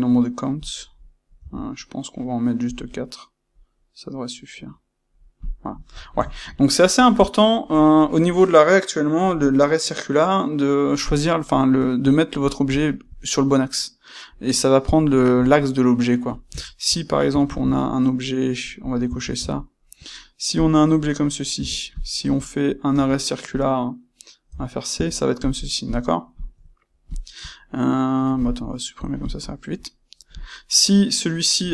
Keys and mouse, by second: 5.4 click, 12.4 click, 17.4 shift+c, 20.6 shift+c, 21.5 c, 22.0 click, 22.2 space, 24.4 space, 26.3 click, 27.0 shift+click, 28.9 click, 30.2 click.